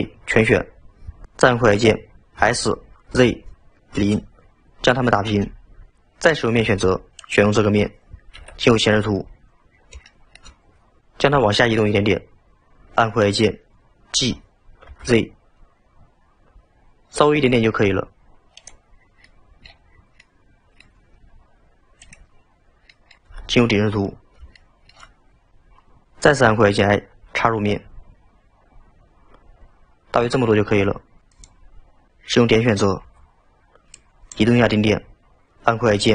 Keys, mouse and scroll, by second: 6.7 3, 7.2 click, 8.4 KP_1, 9.2-10.1 scroll up 9, 10.1 shift+middle click, 14.2 g, 19.1 scroll down 2, 19.2-19.9 middle drag, 19.9 scroll down 3, 20.2-22.0 middle drag, 22.0 click, 22.9 middle click, 23.4 KP_7, 24.2-24.6 scroll down 2, 24.6 shift+middle drag, 24.8-25.5 shift+middle drag, 34.0 click.